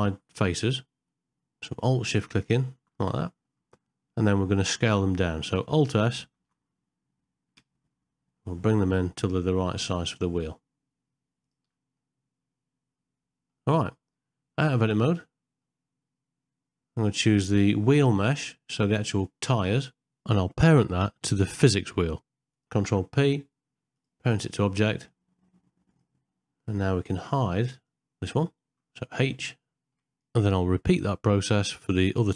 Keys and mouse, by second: 0.0 shift+middle click, 1.2 alt+shift+click, 1.6 middle click, 3.5 ctrl+middle click, 4.0 middle click, 4.6 shift+middle click, 5.2 middle click, 6.4 alt+s, 12.1-13.5 middle drag, 15.2 middle click, 19.7 click, 21.8 shift+click, 22.9 ctrl+p, 24.8 ctrl+middle click, 25.9 click, 29.6 middle click, 30.2 middle click, 30.4 middle click, 30.5 middle click, 30.6 click, 30.9 click, 31.1 click, 31.9 ctrl+p, 32.2 click.